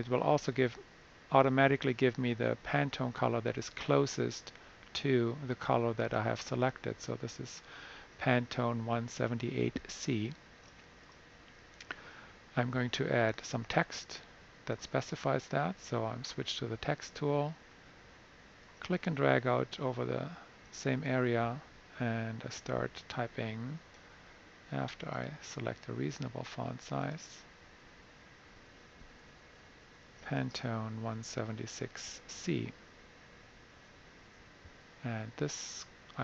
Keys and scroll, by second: 29.0-31.9 typing, 34.0 super+a.